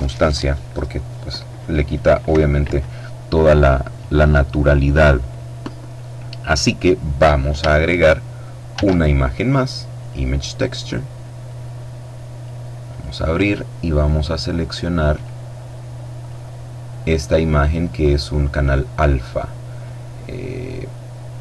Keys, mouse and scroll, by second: 8.2 shift+a, 9.4 click, 10.3 click, 10.9-12.4 drag, 14.6 click, 15.6 click.